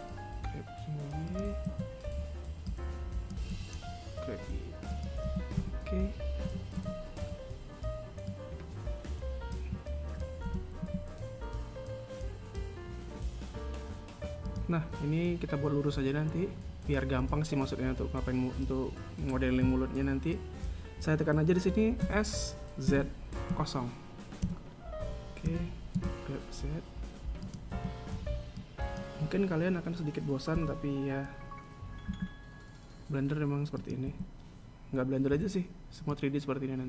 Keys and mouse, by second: 2.0 a, 2.3 b, 5.5-7.5 typing, 10.7 e, 22.3 s, 25.7 g, 27.9 a, 28.3 b, 34.2 a.